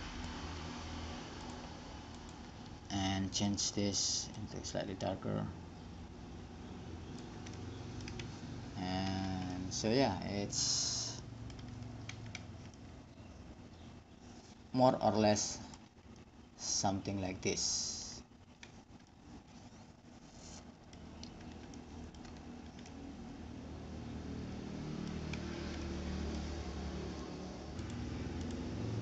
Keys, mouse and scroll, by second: 1.6 middle click, 2.2-5.5 drag, 5.5-8.0 middle drag, 8.3-9.4 drag, 9.4 a, 12.5 middle click, 12.5 click, 15.1-16.4 middle drag, 17.3 middle click, 20.9-22.1 middle drag, 22.2-25.2 middle drag, 25.3-27.7 middle drag, 28.0-29.0 drag.